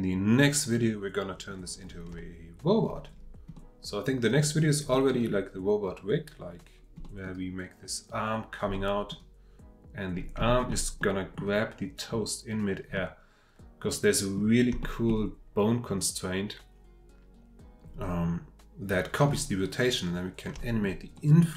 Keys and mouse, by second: 2.2-2.8 shift+middle drag, 3.5-4.2 drag, 4.9-7.0 drag, 8.7-9.1 drag, 10.5 shift+middle drag, 11.0-11.3 middle drag, 12.9-14.4 middle drag, 14.8 shift+middle drag, 20.6 shift+middle click, 21.2 middle click.